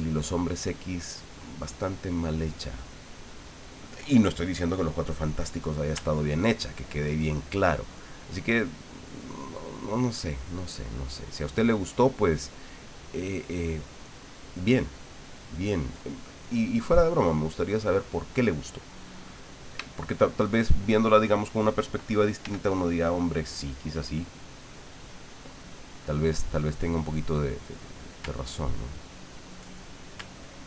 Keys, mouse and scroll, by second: 6.8-8.3 ctrl+drag, 8.6-11.6 ctrl+drag, 11.9-15.9 ctrl+drag, 16.2-17.4 ctrl+middle drag, 17.4-19.2 middle drag, 19.3 middle click, 19.9 shift+middle click, 19.9 shift+click, 22.4 f, 23.1 click, 27.4 click, 27.9 click, 28.2 ctrl+click, 30.5-30.6 ctrl+drag.